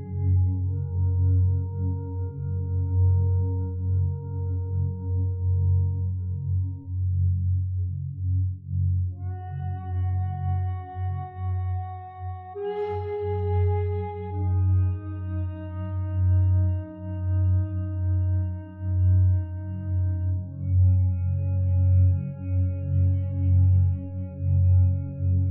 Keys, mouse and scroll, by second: 6.0 0, 6.2 ., 6.4 5, 6.7 Return.